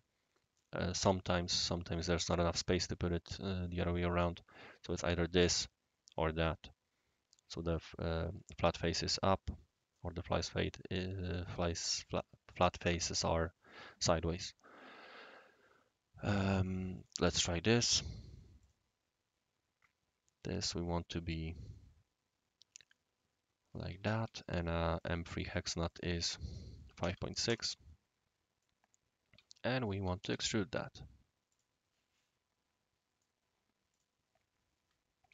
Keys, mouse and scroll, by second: 16.9 click, 18.6 click, 21.6 click, 22.7 click, 23.8 Escape, 24.2 d, 24.9 click, 25.4-26.7 drag, 26.9 typing, 27.4 Return, 28.6 right click, 30.2 shift+e, 31.5 click, 32.1-33.2 middle drag, 32.1-33.2 right drag, 33.9 click, 34.4-35.3 typing, 34.6 click.